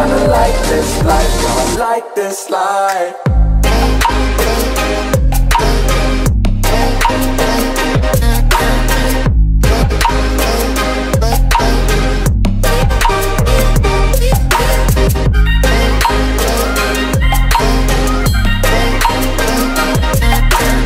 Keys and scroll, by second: 2.8 ctrl+[, 6.0 ctrl+], 8.3 ctrl+], 12.6 ctrl+z, 15.6 Return.